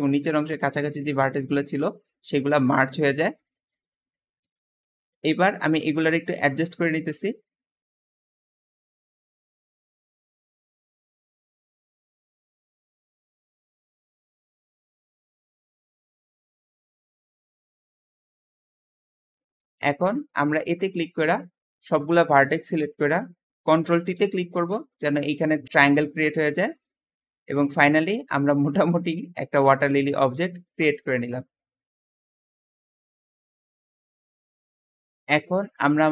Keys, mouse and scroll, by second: 0.0-1.5 drag, 2.4 click, 3.2 click, 3.8 click, 4.6 Escape, 4.8-6.9 middle drag, 6.9 KP_1, 7.6 alt+z, 7.9 alt+a, 8.1 b, 8.7 click, 9.7 alt+a, 9.8 b, 10.4 click, 11.0 alt+a, 11.1 b, 11.4 click, 11.7 click, 12.0 Tab, 12.0 scroll down 8, 12.5 Tab, 12.6 alt+a, 12.7 b, 13.2 click, 13.8 scroll up 4, 14.1 ctrl+KP_Add, 14.4 ctrl+KP_Add, 14.6 ctrl+alt+middle click, 14.8 alt+z, 14.9 s, 16.1 KP_1, 16.2 alt+z, 16.3 alt+a, 16.4 b, 17.0 click, 17.7 scroll up 3, 17.9 alt+a, 18.2 alt+shift+click, 18.7 click, 19.0 alt+z, 19.1 Tab, 19.2-22.6 middle drag, 22.6-23.4 scroll up 2, 24.1 ctrl+t, 24.6-24.9 scroll down 2, 24.9 middle click, 25.5-25.9 scroll up 1, 25.9-28.0 middle drag, 28.0 Tab, 28.3-30.3 middle drag, 30.6-31.9 shift+middle drag, 35.6 g, 36.0 click.